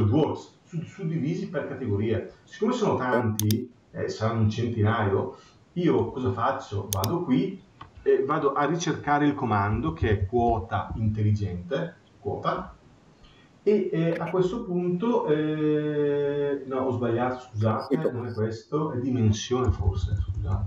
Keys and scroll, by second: 19.4 BackSpace.